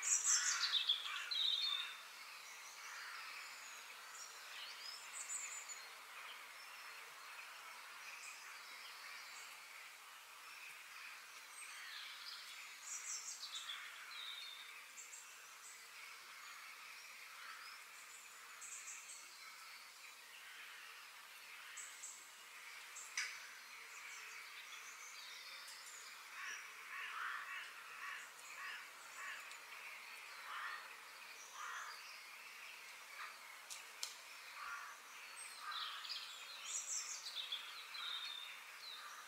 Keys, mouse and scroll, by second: 17.9-19.8 middle drag, 22.3-24.1 middle drag, 25.9-26.5 scroll down 1, 26.5 middle click, 27.4-28.4 scroll up 2, 28.4-29.5 scroll up 1, 29.9 click, 30.4 f, 32.3-34.1 middle drag, 34.4-34.7 scroll up 2, 34.7-36.3 middle drag, 36.3 KP_3, 37.0-37.5 scroll up 3, 37.5-39.2 shift+middle drag.